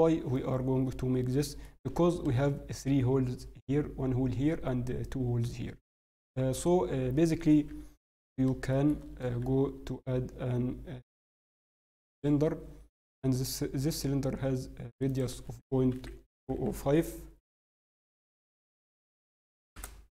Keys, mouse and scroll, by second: 0.2-0.8 scroll down 7, 0.9 middle click, 1.6 scroll, 5.4-5.7 scroll down 4, 5.8-6.1 scroll up 4, 6.1 Tab, 6.5-6.9 scroll, 7.5 scroll down 2, 7.7 KP_7, 8.0 scroll up 1, 8.7 shift+middle click, 13.1 click, 16.5 0.